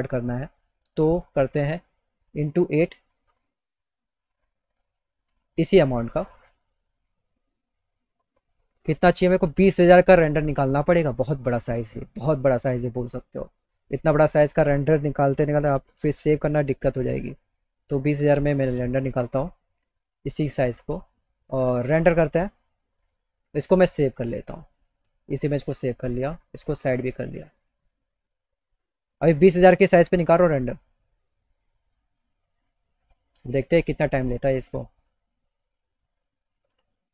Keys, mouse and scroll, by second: 0.7 click, 2.0 click, 3.4 click, 5.8 click, 6.7 click, 7.8 click, 9.0 click, 13.7 click, 15.5 KP_0, 20.0 click, 21.8 click, 24.3 click, 25.9 click, 27.5 click, 28.3 click, 30.1 alt+click, 35.6 click.